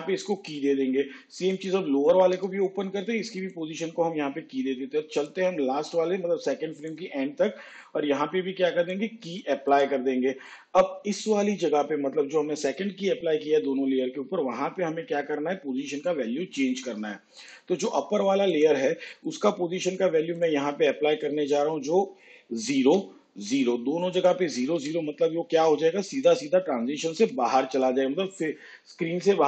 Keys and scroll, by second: 3.4 p, 24.0 0, 25.9 0, 28.3 0.